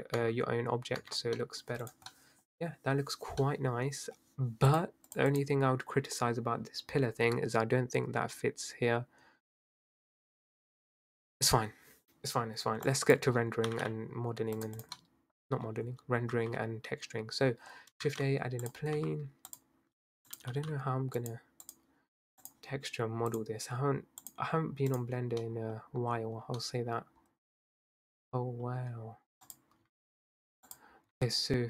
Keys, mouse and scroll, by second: 0.2 Tab, 1.0 Tab, 1.1 scroll down 5, 1.4 middle click, 1.8 click, 2.1-2.9 middle drag, 2.9 scroll up 1, 3.1 scroll down 4, 3.4-4.2 middle drag, 4.2-4.7 scroll up 2, 4.7 click, 5.1 click, 5.3 click, 6.7 scroll down 3, 7.0-8.8 scroll up 4, 12.4-12.9 scroll down 6, 12.9 click, 13.4 scroll up 5, 13.7 g, 14.8 drag, 15.0 middle click, 15.4-16.4 scroll down 2, 16.4 shift+a, 18.0 shift+a, 19.0 s, 20.0 s, 20.5 g, 21.6 click, 23.5 click, 24.2-25.3 drag, 25.3-25.8 middle drag, 25.8-26.2 scroll down 2, 26.2-26.6 scroll up 6, 26.6-27.8 middle drag, 27.8 scroll up 2, 27.9-29.0 middle drag, 29.0-29.5 scroll down 1, 29.5 click, 29.8 Tab, 30.7 click, 31.1 e.